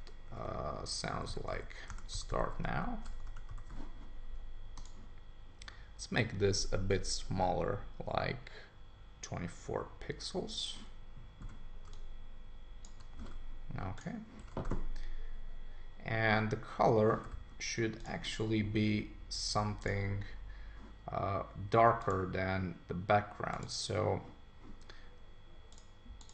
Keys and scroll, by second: 1.9-3.2 typing, 3.2 super+Return, 14.4 super+d.